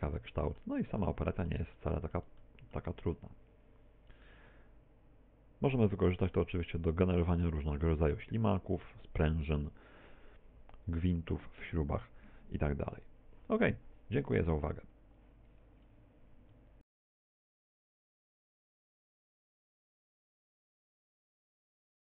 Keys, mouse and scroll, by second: 0.5 click, 1.5 middle click, 2.4 middle click, 4.3 middle click, 5.3 middle click, 6.1 middle click, 6.9 middle click, 7.5 shift+middle click, 11.7 shift+middle click.